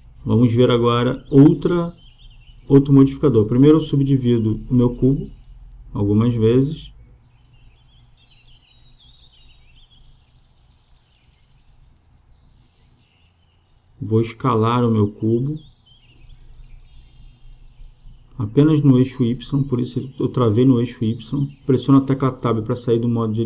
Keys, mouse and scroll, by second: 0.7 n, 5.9 middle click, 6.8 Tab, 10.1-12.9 drag, 13.1-15.3 middle drag, 15.3 s.